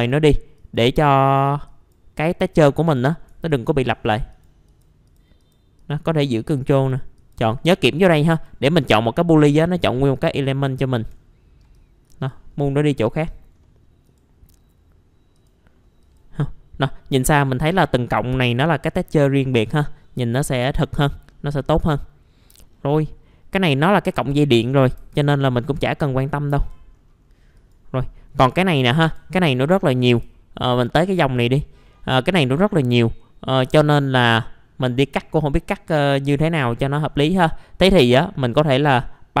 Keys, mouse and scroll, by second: 3.5 ctrl+click, 3.9 ctrl+click, 4.3 ctrl+click, 4.7 ctrl+click, 5.0 ctrl+click, 5.8 ctrl+click, 6.2 ctrl+click, 6.7 ctrl+click, 7.2 ctrl+click, 8.3 ctrl+click, 9.5 ctrl+click, 10.1 ctrl+click, 10.8 ctrl+click, 11.7 click, 13.0-13.6 scroll up 1, 13.6 middle click, 14.0 right click, 15.4 click, 16.8-17.2 scroll down 1, 17.2 middle click, 17.6-18.7 scroll up 1, 19.0-19.6 scroll down 1, 19.6 middle click, 20.0 scroll up 1, 20.2 F4, 21.3 middle click, 21.8-22.6 scroll up 1, 22.6 middle click, 22.7-23.2 scroll down 1, 23.2-23.6 scroll up 1, 23.6 click, 24.5-25.0 scroll up 1, 25.0 F4, 25.5 scroll down 1, 26.2 middle click, 26.6 click, 26.9-27.5 scroll up 1, 27.5 click, 28.3-28.7 scroll up 1, 29.0 F4, 29.2-29.7 scroll up 1, 29.9 scroll down 1, 30.1 F4, 30.5-31.1 scroll down 1, 31.1-33.7 scroll up 1, 38.6 click.